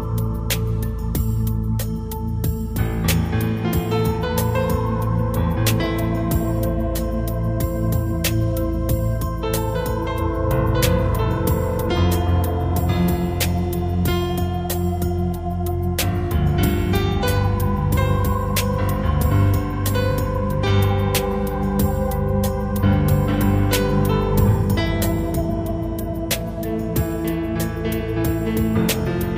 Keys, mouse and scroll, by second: 2.1 right click, 3.2 click, 13.8 right click, 15.4 click, 23.8 right click, 24.9 click.